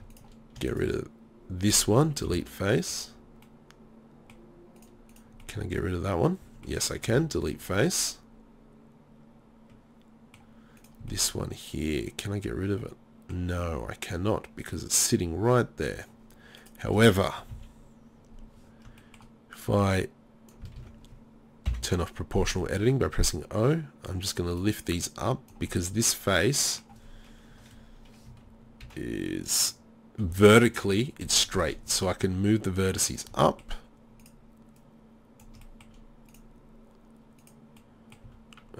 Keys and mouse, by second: 2.3 Delete, 5.9 middle click, 7.1 Delete, 10.8-12.0 drag, 12.0-13.1 middle drag, 17.5 KP_3, 20.8 ctrl+z, 21.7 o, 25.7-27.7 middle drag, 27.8 KP_3, 28.3 KP_1, 28.8 z, 31.2 KP_3, 32.8 click, 34.2 click, 34.2 right click, 34.8 click, 34.8 right click, 35.6 middle click, 35.8 click, 35.8 right click, 35.8 middle click, 36.3 click, 36.3 right click, 38.0 click, 38.3 z.